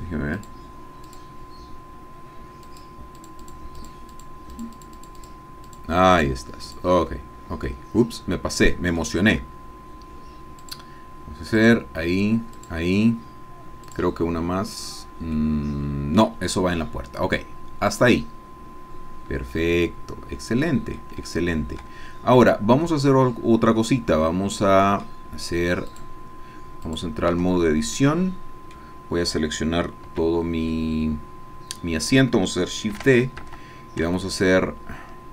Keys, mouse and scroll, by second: 0.4-1.9 drag, 2.7 click, 3.5 click, 4.7-6.0 drag, 6.2 click, 6.6 click, 7.7-9.1 middle drag, 10.6 click, 11.6 click, 12.6 click, 13.9 click, 15.4-16.4 middle drag, 17.9 click, 19.5-21.1 drag, 21.2 shift+click, 22.8 shift+click, 24.2 click, 26.1 click, 27.0 click, 28.0 Tab, 28.1 click, 30.1 a, 30.7-32.3 drag, 32.9 shift+d, 33.5 Escape, 34.3-35.3 shift+drag.